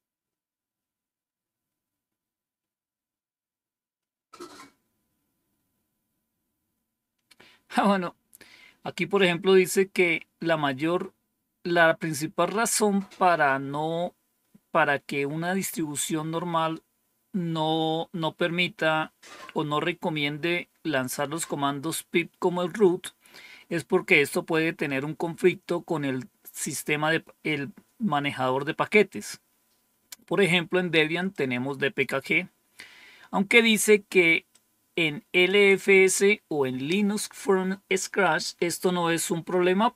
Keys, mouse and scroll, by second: 21.0 click, 31.2 click, 34.4-35.4 drag.